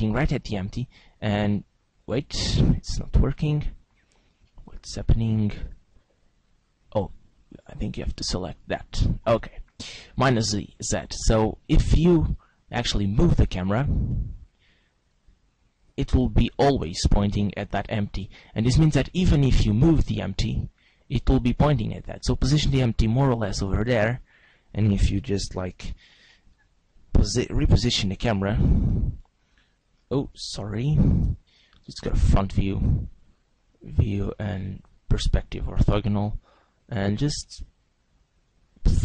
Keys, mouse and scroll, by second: 0.3 g, 2.3 right click, 4.6 middle click, 5.0-6.4 scroll down 4, 5.9 g, 7.0 right click, 8.2 click, 8.9 g, 12.4 right click, 13.4 click, 14.5 click, 16.0 g, 18.3 right click, 19.0 right click, 19.7 right click, 20.4 g, 23.7 click, 24.4 right click, 27.6 alt+g, 30.3 right click, 31.2 click, 32.8 scroll down 1, 34.0 click, 35.4-36.0 scroll up 3, 36.0 g.